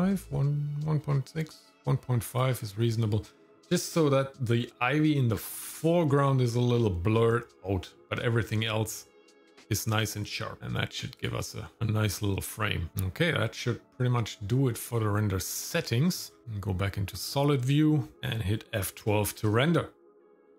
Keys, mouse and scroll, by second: 10.6 click, 11.5 click, 16.0-16.4 scroll up 3, 17.4 click.